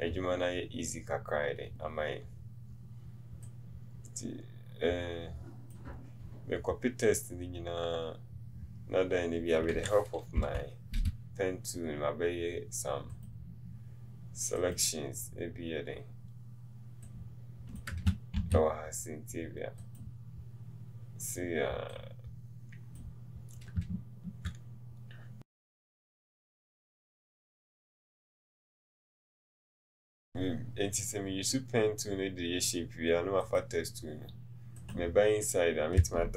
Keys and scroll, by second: 10.5 p.